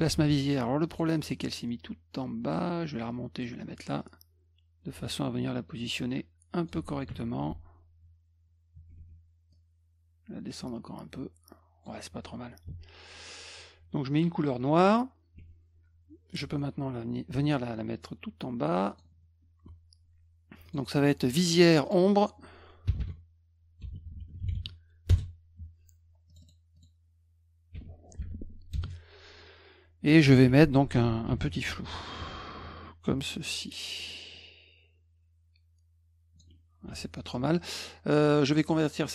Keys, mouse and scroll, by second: 0.2 ctrl+z, 0.9 click, 1.4-3.4 drag, 4.0 click, 7.1 F2, 9.5 click, 14.8 click, 17.4-19.0 drag, 20.6 click, 20.8 click, 21.8 click, 22.9-25.0 typing, 25.1 Return, 26.3 click, 26.4 click, 26.8 click, 28.2 8, 28.7 Return, 31.3 ctrl+shift+f, 33.1-36.4 drag, 36.9 F2.